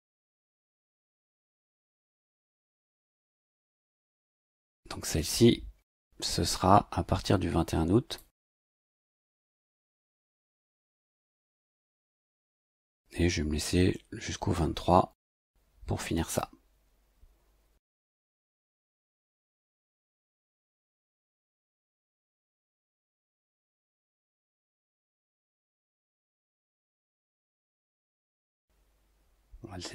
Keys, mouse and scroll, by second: 0.5 click, 4.1 click, 5.8 click, 8.1 click, 9.7 click, 11.5 click, 15.1 click, 19.5 click, 20.5 click, 21.4 click, 23.2 click, 25.7 click.